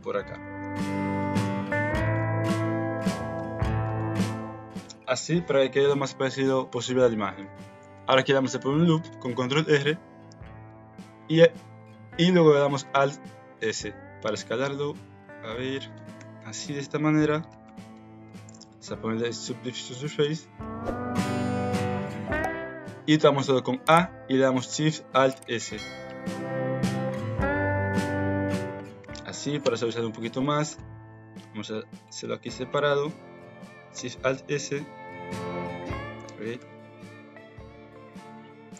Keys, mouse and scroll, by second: 0.6 g, 1.4 r, 2.1 g, 2.9 click, 3.3 r, 4.0 s, 7.5 middle click, 7.9 ctrl+r, 12.9 alt+s, 16.0 alt+z, 16.1 Tab, 16.5 middle click, 17.6 ctrl+2, 18.1 middle click, 22.0 Tab, 22.4 a, 25.3 alt+shift+s, 28.9 KP_1, 29.6 Tab, 30.3 shift+click, 30.7 alt+z, 31.4 Tab, 32.3 click, 33.1 s, 33.9 alt+shift+s, 36.5 alt+shift+s.